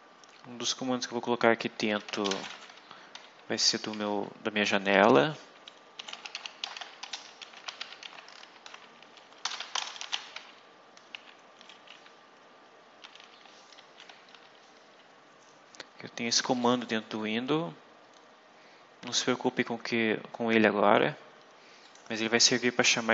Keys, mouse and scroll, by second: 1.6-2.9 typing, 4.0-11.0 typing, 4.8 End, 12.7-14.2 typing, 13.7 Right, 16.5 click, 21.7 click.